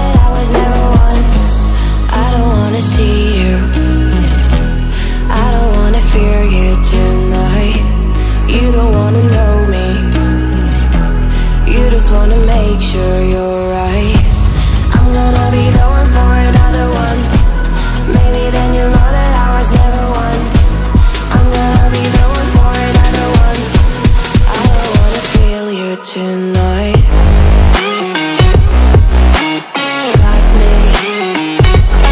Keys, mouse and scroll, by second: 1.2 click, 2.2 BackSpace, 3.4 typing, 5.7 click, 6.9-7.6 typing, 11.1 click, 12.1 BackSpace, 14.3-15.5 typing, 17.2 click, 19.0 BackSpace, 20.3-21.9 typing, 24.1-32.1 drag.